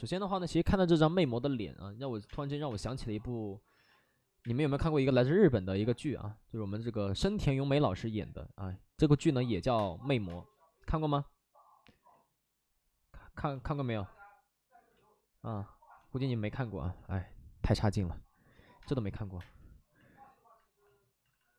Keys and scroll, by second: 1.9 alt+s, 2.2 space, 2.5 3, 2.6 space, 4.3 space, 9.1 space, 9.4 3, 9.7 space, 10.2 space, 11.8 ctrl+z, 13.7 ctrl+z, 14.8 ctrl+z, 16.9 alt+s, 18.7 space, 19.1 3, 19.3 space, 20.7 space.